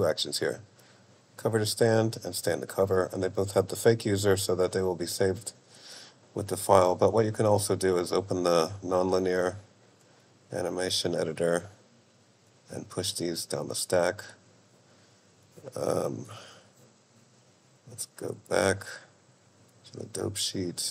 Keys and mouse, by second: 5.2 click, 7.2-9.3 drag, 11.1 click, 12.6 click, 18.4-20.1 drag.